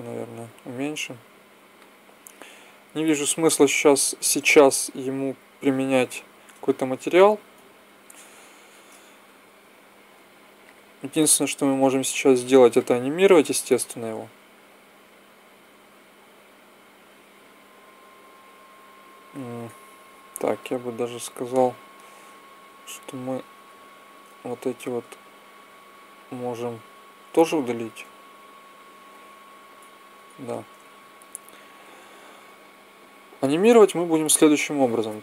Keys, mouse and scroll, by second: 0.8 s, 1.7-5.1 drag, 5.5-7.3 drag, 7.3 KP_1, 8.3 KP_0, 16.3 click, 16.5 click, 20.3 Tab, 21.6 Tab, 22.0-23.0 drag, 23.3 Tab, 27.8 x, 30.0 Tab.